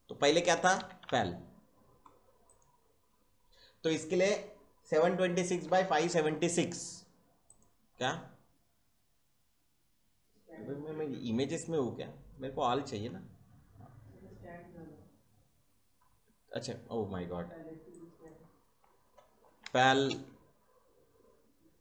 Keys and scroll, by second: 0.2-1.4 typing, 19.1-20.3 typing.